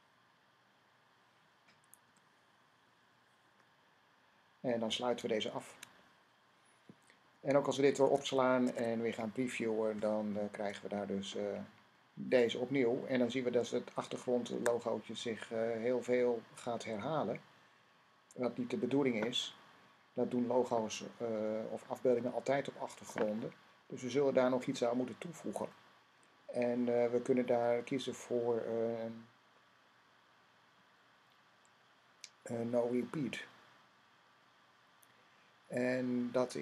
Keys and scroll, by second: 1.9 ;, 5.4 }, 8.0 super+s, 8.5 Tab, 10.4 r, 14.3 Tab, 32.8 n.